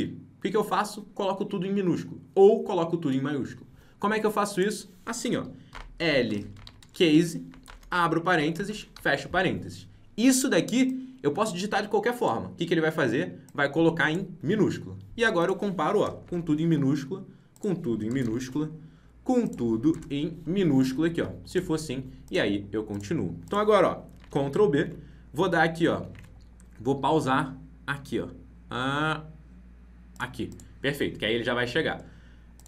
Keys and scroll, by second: 24.1 ctrl+b, 24.7 alt+Tab, 31.5 alt+Tab.